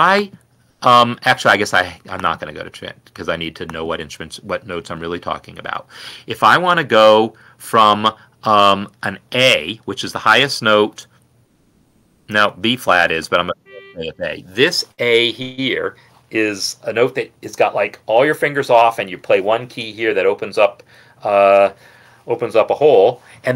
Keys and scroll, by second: 6.2 n, 14.0 a.